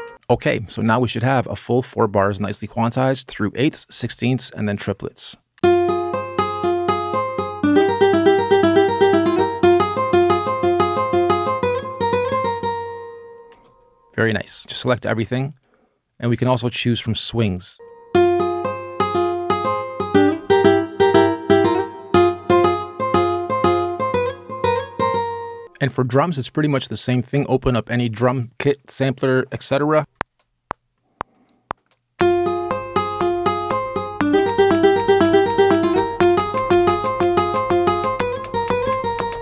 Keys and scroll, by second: 5.3 space, 13.3 space, 14.6 super+a, 25.6 space, 30.0 super+z, 30.0 BackSpace, 30.0 r.